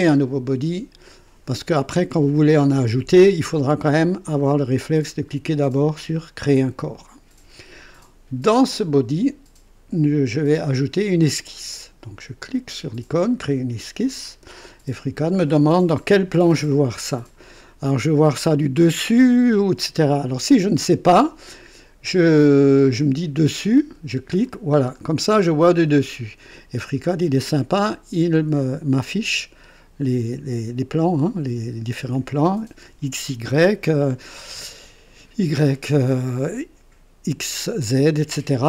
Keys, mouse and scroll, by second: 13.4 click, 23.7 click, 24.7-25.8 scroll down 2, 25.8 right click, 28.3-32.2 drag.